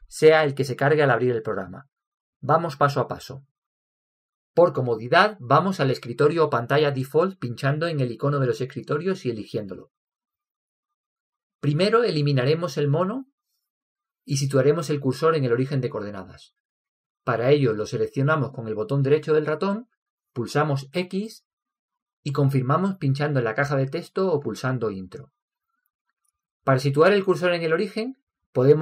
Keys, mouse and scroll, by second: 18.9-20.8 right drag, 21.1 x.